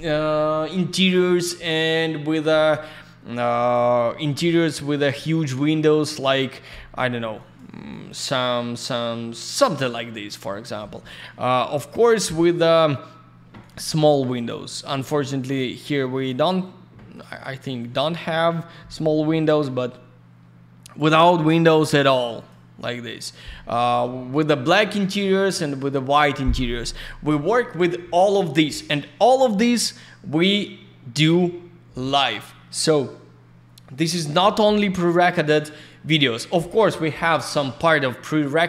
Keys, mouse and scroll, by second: 4.5-5.0 scroll up 1, 6.0 click, 6.5 scroll down 1, 7.2 scroll up 1, 7.4 click, 7.5 click, 7.9 click, 8.1 click, 8.8 click, 10.4 scroll down 1, 11.7 scroll up 1, 12.2 click, 12.3 click, 13.6 click, 13.7 click, 14.3 click, 14.6 click, 15.4 click, 15.5 click, 16.1 click, 16.6 click, 17.1 click, 17.2 click, 17.8 click, 18.0 click, 19.5 click, 22.4 click, 22.6 click, 23.3 click, 25.1 click, 26.7 click, 31.2 click, 35.2 click.